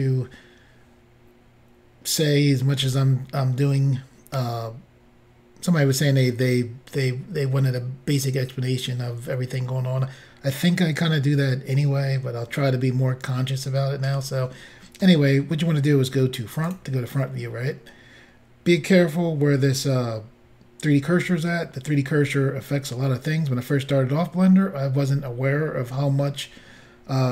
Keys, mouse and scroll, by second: 16.7 click.